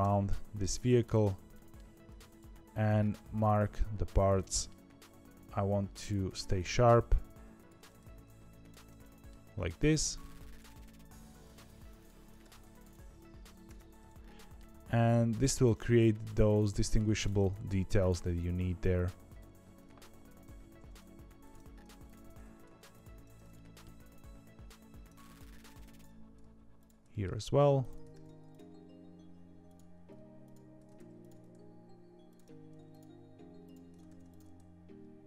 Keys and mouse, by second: 1.4 middle click, 2.3 alt+click, 4.3 middle click, 7.9 ctrl+e, 8.9 middle click, 12.3 ctrl+e, 13.6 Tab, 14.1 middle click, 15.4 middle click, 16.0 middle click, 16.7 middle click, 17.2 Tab, 18.0 click, 19.3 ctrl+r, 20.4 ctrl+z, 21.4 click, 22.3 ctrl+e, 23.4 middle click, 27.0 middle click, 28.0 ctrl+e, 29.6 click, 30.9 ctrl+e, 34.0 ctrl+e.